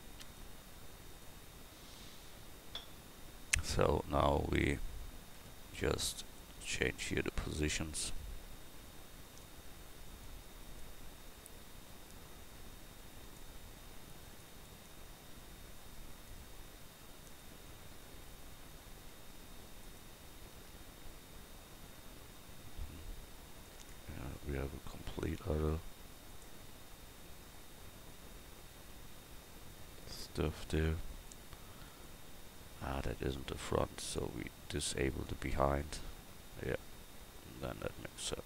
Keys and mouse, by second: 4.4 right click, 5.4 Tab, 8.2 g, 13.2 g, 14.2 right click, 15.2 g, 16.9 Tab, 19.2 Tab, 24.6 s, 27.3 g, 31.1-38.2 drag.